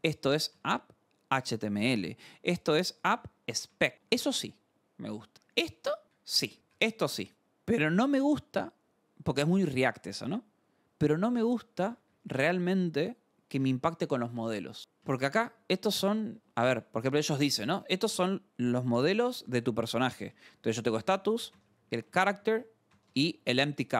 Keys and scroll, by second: 0.0-8.0 typing, 11.9 k, 13.3 Return, 13.5 shift+v, 14.3 Escape, 14.7-17.7 typing, 16.7 Escape, 18.6 Return, 19.0-23.8 typing, 22.2 Escape, 23.9 Escape.